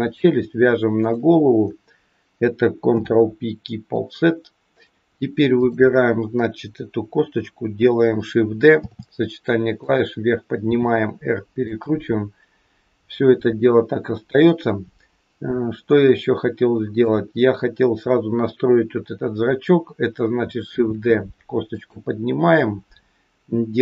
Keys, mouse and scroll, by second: 1.1 shift+click, 2.9 ctrl+p, 5.5 click, 8.8 shift+d, 10.7 r, 13.9-14.5 scroll up 2, 14.5-15.4 scroll up 1, 15.5-16.1 scroll down 1, 16.1 shift+middle click, 20.8 shift+d.